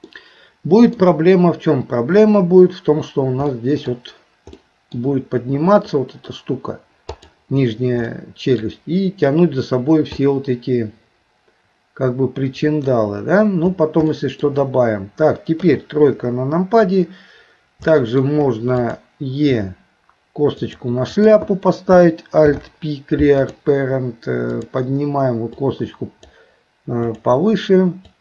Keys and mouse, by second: 0.1 middle click, 3.6 middle click, 4.6 middle click, 8.1 middle click, 10.2-12.8 middle drag, 14.1 shift+middle click, 15.6 KP_3, 18.0 shift+middle click, 18.8 click, 19.5 e, 21.2 click, 22.4 alt+p, 24.5 click, 25.8 click, 27.1 click, 28.1 click.